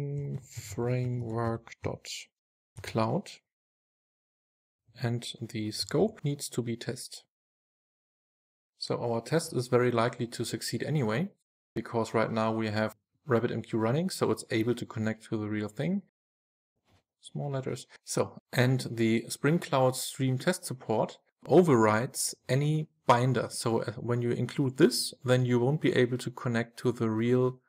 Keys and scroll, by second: 3.6 super+s, 8.8 super+s, 9.3 super+s, 16.7 Delete.